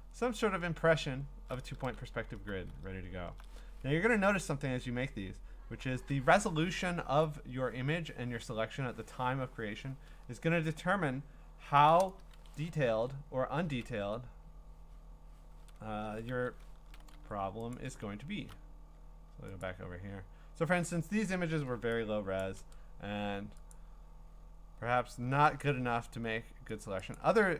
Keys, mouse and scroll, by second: 0.5-1.3 scroll up 11, 2.4 b, 2.8 scroll up 1, 2.9 scroll, 3.9-5.5 scroll, 10.0-11.9 scroll, 12.6 click, 12.9 ctrl+Tab, 13.8 ctrl+Tab, 15.7-17.1 scroll, 16.3 ctrl+d, 17.7 ctrl+click, 18.1-18.6 scroll, 19.6 click, 20.9-21.7 scroll, 22.4 click, 23.7 click, 24.1-25.6 scroll, 25.6 click, 25.9 scroll, 26.8 click, 27.1 click.